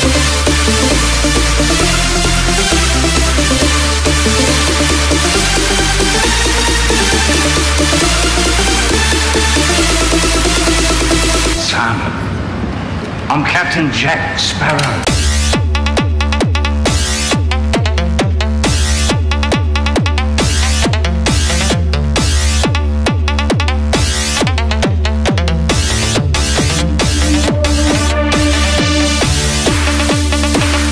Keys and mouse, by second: 21.0-23.7 drag.